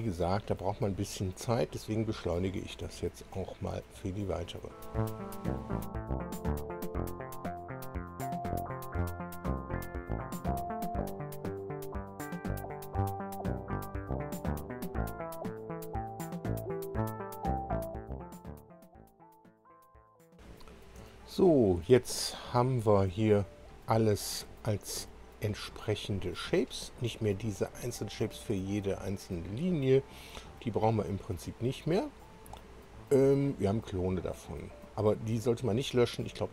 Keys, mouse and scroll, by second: 3.2 click, 4.5 ctrl+click, 5.4 ctrl+click, 5.8 ctrl+click, 6.0 ctrl+click, 6.1 ctrl+click, 6.2 ctrl+click, 6.2 ctrl+click, 6.4 ctrl+click, 6.4 ctrl+click, 6.5 ctrl+click, 6.6 ctrl+click, 6.6 ctrl+click, 6.8 ctrl+click, 6.8 ctrl+click, 6.9 ctrl+click, 7.0 ctrl+click, 7.1 ctrl+click, 7.5 click, 7.6-9.6 typing, 8.0 click, 8.0 ctrl+click, 8.1 ctrl+click, 8.2 ctrl+click, 8.4 click, 8.9 shift+click, 9.0 click, 9.1 ctrl+click, 9.2 ctrl+click, 9.3 ctrl+click, 9.5 click, 10.1 click, 10.2 ctrl+click, 10.2 ctrl+click, 10.3 ctrl+click, 10.4 ctrl+click, 10.5 ctrl+click, 10.6 ctrl+click, 10.8 space, 11.0 click, 11.1 0, 11.3 Return, 11.5 click, 11.6 ctrl+click, 11.7 ctrl+click, 12.3-13.8 typing, 13.4 click, 13.5 Tab, 13.7 Return, 14.1 click, 14.1 ctrl+click, 14.2 ctrl+click, 14.3 ctrl+click, 14.6 click, 14.9 Return, 15.1 Return, 15.2 space, 15.4 click, 15.5 ctrl+click, 15.6 ctrl+click, 15.7 ctrl+click, 16.0 click, 16.1 Return, 16.3 space, 16.5 click, 16.6 ctrl+click, 16.6 ctrl+click, 16.7 ctrl+click, 16.9 ctrl+click, 16.9 ctrl+click, 17.1 ctrl+scroll up 1, 17.3 ctrl+click, 17.3 ctrl+click, 17.4 ctrl+click, 17.5 ctrl+click, 17.6 space, 17.9 click, 18.0 Return, 18.2 space, 18.3 click, 18.4 ctrl+click, 18.5 ctrl+click, 18.6 ctrl+click, 18.7 ctrl+click, 18.8 ctrl+click, 18.9 ctrl+click, 19.0 ctrl+click, 19.1 ctrl+click, 19.2 ctrl+click, 19.4 space, 19.5 click, 19.7 Return, 20.0 scroll up 1, 20.1 click, 20.2 shift+click, 20.4 click, 21.3 shift+click, 22.7-23.9 drag, 24.9-25.3 scroll up 1, 25.4 scroll down 1, 26.0-26.4 scroll down 1, 26.4-26.8 scroll up 1, 26.9-28.7 scroll up 9, 28.9-29.4 scroll up 2, 29.4-29.7 scroll down 2, 29.7-30.0 scroll up 2, 30.4-32.2 scroll down 10, 32.8-33.2 scroll up 2.